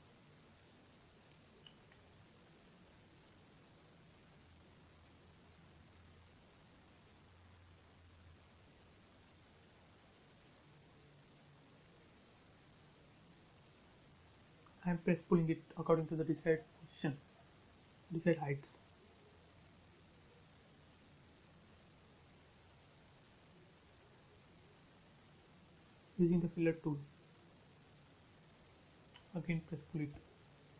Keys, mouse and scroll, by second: 2.4-3.5 typing, 3.1 Return, 5.3-6.3 scroll up 1, 6.9 p, 7.0 click, 8.4 space, 8.9-9.7 scroll down 1, 9.7-11.1 middle drag, 11.1 ctrl+z, 11.9 p, 12.0 click, 13.2 ctrl+z, 13.9 click, 16.8-17.7 typing, 17.3 Return, 18.3 scroll down 1, 19.0 middle click, 19.1 scroll down 1, 20.1-20.6 scroll up 1, 23.4 f, 24.0 click, 26.8 click, 26.9 space, 27.6 p, 27.9 click.